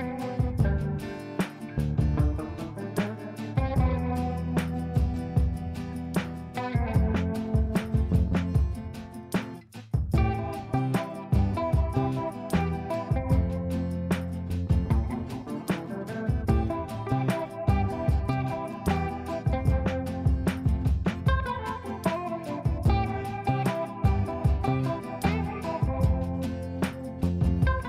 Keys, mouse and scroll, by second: 3.3 F2, 3.7-4.3 drag, 6.5 right click, 7.8-8.4 shift+drag, 16.2 space, 16.7-17.6 drag, 22.1 F3, 23.4 click, 24.5 F3, 24.9 F2, 25.6-26.5 drag.